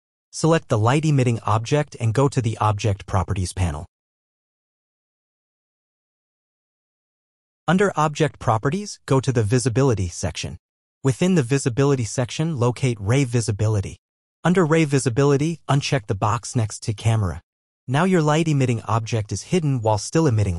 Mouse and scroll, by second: 0.8 right click, 3.5 click, 6.2 click, 9.9 click, 14.8 click, 17.7 right click.